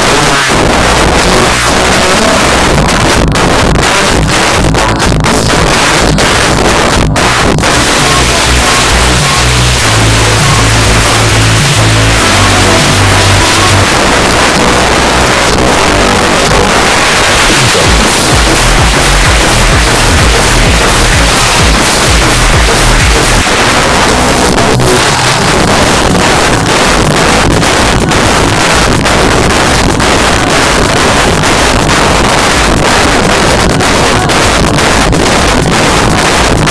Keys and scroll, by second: 1.7 p, 1.8-2.5 Up, 2.7 Up, 2.8 Up, 3.0 Return, 13.9 Page_Down, 23.4 Page_Down.